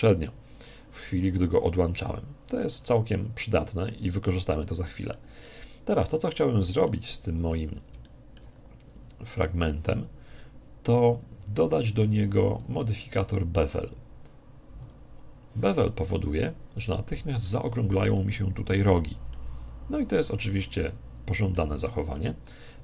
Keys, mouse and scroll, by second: 3.1 Tab, 4.2-7.1 middle drag, 7.4-9.9 middle drag, 12.7 Tab, 13.8 click, 15.9-17.6 middle drag, 18.1-19.9 middle drag, 20.6-22.8 middle drag, 22.5 Tab.